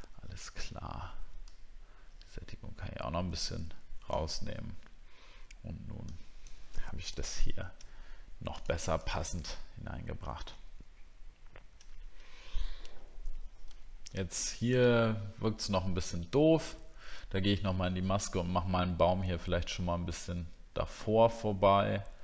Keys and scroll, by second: 9.5 alt+scroll down 1, 11.4 alt+scroll down 1, 13.8 alt+scroll up 1.